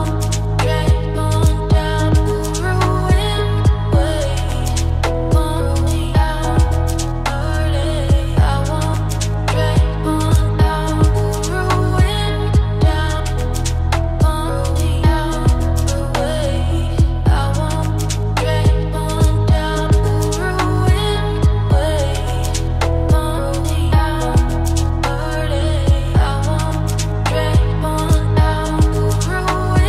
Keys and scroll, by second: 3.8 ctrl+space, 12.6 ctrl+space, 22.1 ctrl+z, 28.3 ctrl+x.